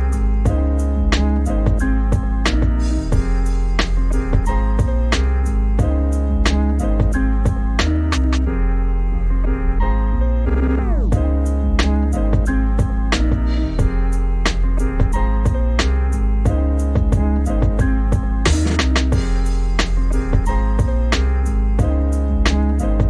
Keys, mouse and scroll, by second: 0.1 middle click, 0.5 click, 0.8 middle click, 1.0-3.3 typing, 1.9 ctrl+z, 4.9 click, 5.1 click, 5.5 s, 5.9 scroll up 3, 6.2 click, 6.7 click, 6.9 shift+click, 7.1 s, 7.4 middle click, 8.2 click, 8.3 KP_3, 8.4 g, 8.9 g, 9.0 middle click, 9.2 click, 9.3 middle click, 9.4 shift+click, 9.6 click, 9.8 middle click, 10.1 shift+click, 10.1 middle click, 10.4 shift+click, 10.8 right click, 10.9 middle click, 11.5 click, 11.6 click, 11.8 middle click, 12.2-14.1 typing, 12.7 middle click, 14.6 click, 15.7 alt+shift+click, 16.1 ctrl+z, 16.7 right click, 17.1 middle click, 17.5 click, 17.8 alt+shift+click, 17.9 middle click, 18.1 alt+shift+click, 18.2 middle click, 18.4 alt+shift+click, 18.7 right click, 18.7 middle click, 18.9 s, 19.3 middle click, 20.0 click, 20.1 middle click, 20.3 Tab, 20.5 right click, 20.6 middle click, 20.8 Tab, 21.0 middle click, 21.2 click, 21.5 click, 21.7 s, 22.2 Tab, 22.3 middle click, 22.6 Tab, 23.0 click.